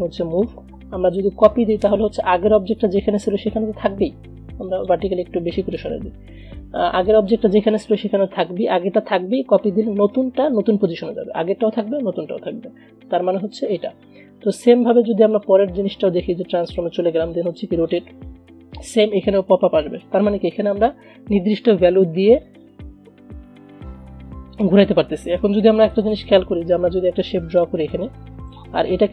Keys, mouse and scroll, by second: 4.8 click, 7.2 click, 11.1 click, 13.4 Delete, 14.6 click, 25.5 click, 26.7 Delete, 27.6 click, 28.2-29.1 shift+drag.